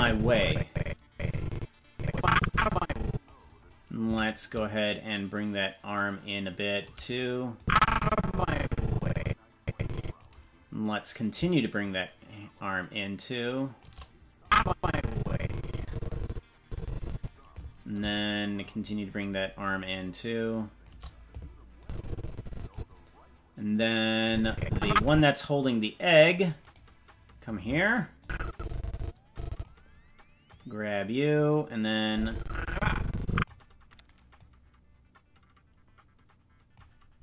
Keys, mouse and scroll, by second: 4.8-6.8 shift+drag, 7.6-10.2 drag, 11.8-13.8 shift+drag, 14.4-17.3 drag, 18.6-20.9 shift+drag, 21.8-22.8 drag, 24.2-25.2 drag, 26.1-28.2 right drag, 28.2-29.6 drag, 30.4 click, 32.1-33.5 drag, 34.3-36.8 drag.